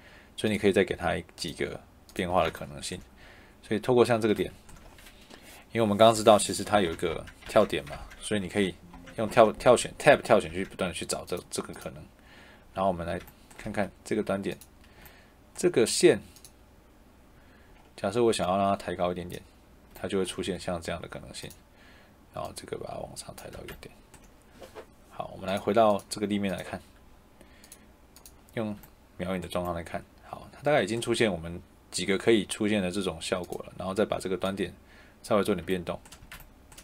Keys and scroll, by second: 2.2 Escape, 6.1 Tab, 13.5 Escape, 20.3 Escape, 23.5 Escape, 36.1 Escape.